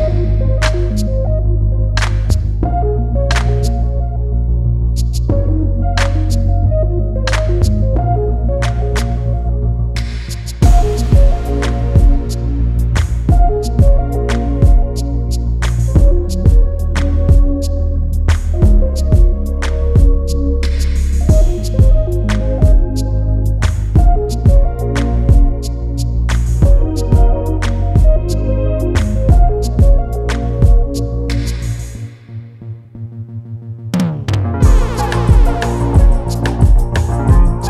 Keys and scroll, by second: 16.2 ctrl+u, 30.3 ctrl+s.